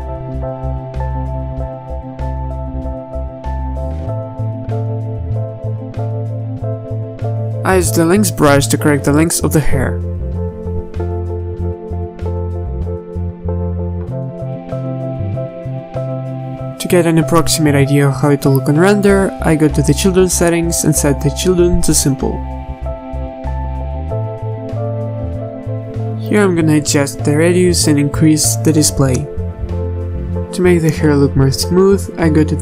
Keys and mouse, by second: 0.4 z, 2.4 z, 3.1 z, 9.5 f, 18.0 middle click, 19.9-27.2 drag, 30.2-31.2 drag, 31.6-32.6 drag.